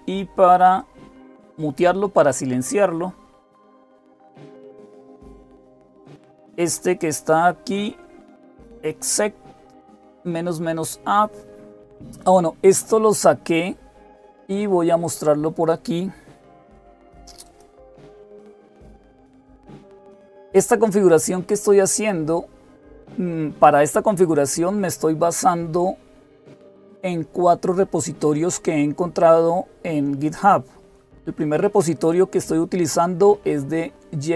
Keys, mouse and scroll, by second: 0.6-2.5 drag, 3.5 click, 17.4 click.